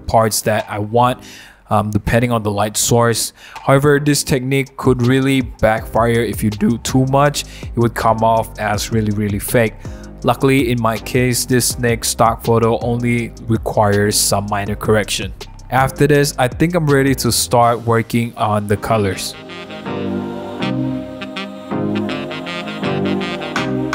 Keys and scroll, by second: 3.3 super+z, 5.6 v, 6.0 super+0, 6.2 super+-, 7.7 super+1, 10.4 b, 11.2 x, 12.2-12.7 typing, 14.2 v, 14.6 super+0, 14.8 super+-, 15.2 super+-, 15.3 super+1, 15.9 b, 16.4 x, 18.2 v, 18.6 super+0, 18.8 super+-, 19.4 super+1, 19.7-23.9 typing.